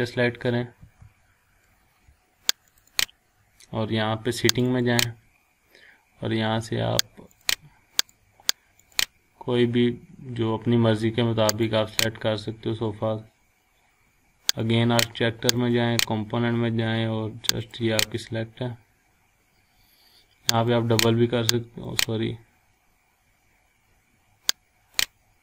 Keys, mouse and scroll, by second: 2.7 click, 7.3 click, 11.5 click, 14.8 click, 20.5 click, 24.1 scroll up 1, 25.0 click.